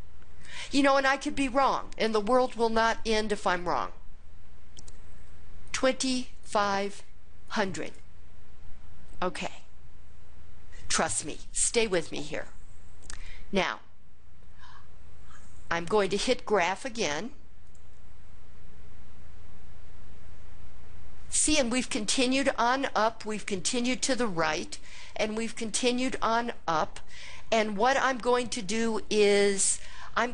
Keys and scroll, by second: 0.5 Down, 5.8 2, 6.5 5, 7.6 0, 7.9 0.